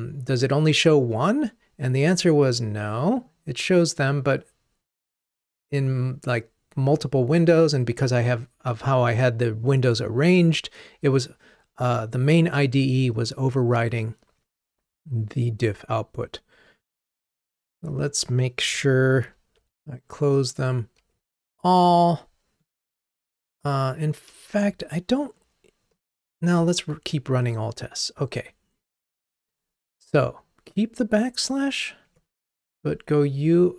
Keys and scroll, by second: 20.5 super+`, 25.4 ctrl+Tab.